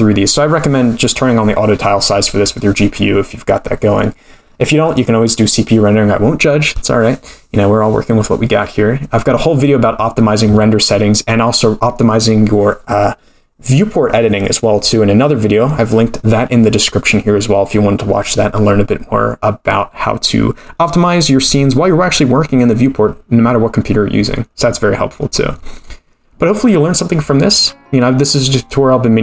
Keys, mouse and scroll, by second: 0.1-1.2 scroll up 3, 1.7-4.9 scroll up 17, 4.9 click, 4.9-5.3 scroll up 3.